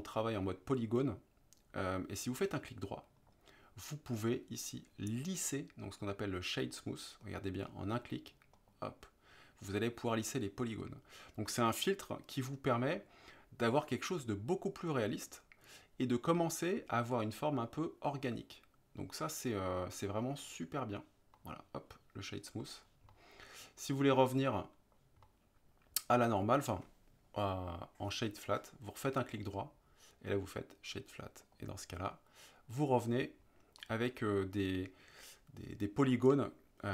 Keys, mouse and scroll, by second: 3.2-8.7 right drag, 13.0-20.5 middle drag, 21.4-22.3 middle drag, 22.7 middle drag, 23.2-25.0 middle drag, 25.4-26.3 middle drag, 29.4-31.7 right drag, 33.9 middle click.